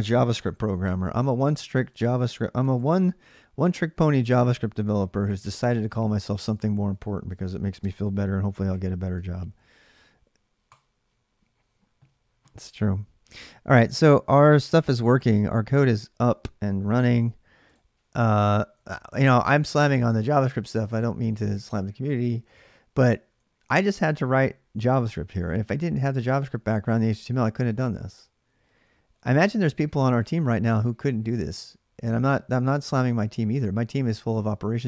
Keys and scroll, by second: 0.1-0.6 typing, 2.4 BackSpace, 2.6 BackSpace, 6.0-9.6 typing, 16.7 alt+Tab, 18.6 ctrl+[, 18.9-23.7 typing, 26.2-26.6 typing, 29.0-29.4 j.